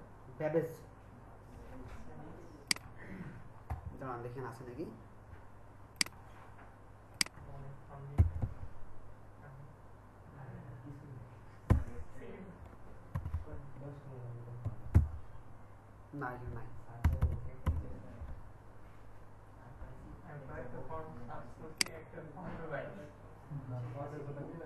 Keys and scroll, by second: 8.3 typing, 11.8 b, 13.1 BackSpace, 13.3 BackSpace, 14.6 a, 14.9 b, 17.0 BackSpace, 17.2 BackSpace, 17.6 BackSpace.